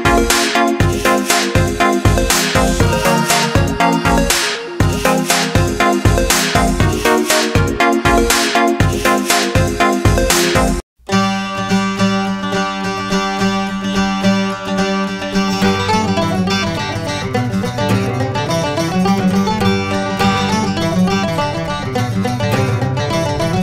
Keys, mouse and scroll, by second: 0.1 click, 3.8 i, 4.1 click, 5.6 right click, 6.3 click, 8.5 i, 8.8 click, 11.3 scroll up 1, 11.4 scroll down 1, 11.8 scroll up 1, 12.5 scroll up 1, 12.9 click, 13.2 click, 13.6 click, 13.8 click, 14.3 click, 14.7 click, 15.1 click, 15.8 click, 16.1 click, 16.5 click, 17.2 click, 17.5 click, 18.0 click, 18.5 click, 18.9 click, 19.2 click, 19.6 shift+click, 19.9 shift+click, 20.2 click, 20.6 click, 20.8 right click, 21.4 click, 22.1 i, 22.5 click.